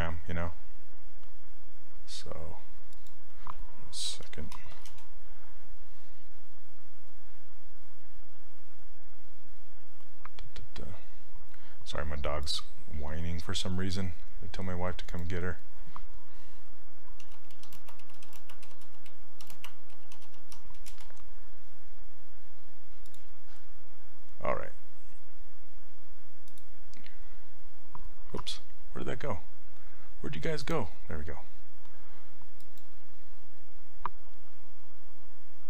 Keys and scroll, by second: 3.9-5.3 typing, 17.0-21.1 typing, 28.4 alt+Tab.